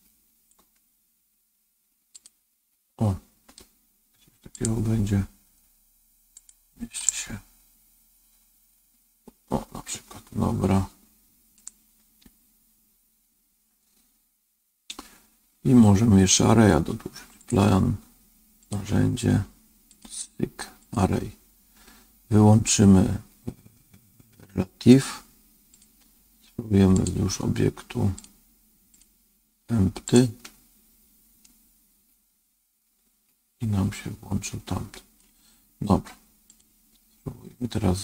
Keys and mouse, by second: 0.7 g, 4.5 click, 6.3 click, 7.0-11.5 middle drag, 17.3 click, 19.9-25.8 drag, 26.9 click, 28.1 click, 28.8-31.3 drag, 31.3-35.1 middle drag, 36.4 click.